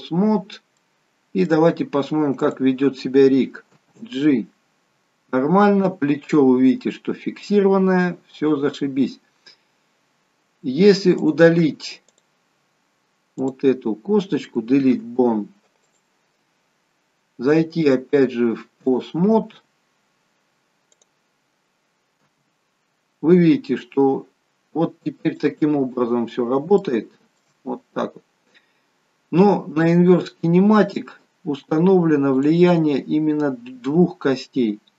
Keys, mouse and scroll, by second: 0.3-0.8 scroll up 1, 0.8 middle click, 1.5 scroll up 1, 2.3 click, 3.7 g, 9.1-10.4 scroll down 1, 10.4-10.9 scroll down 1, 11.2 click, 13.5 click, 14.9 Delete, 17.8 click, 21.0 click, 22.4 g, 25.9 scroll up 5, 26.8 shift+middle click, 29.8 click, 32.5 click.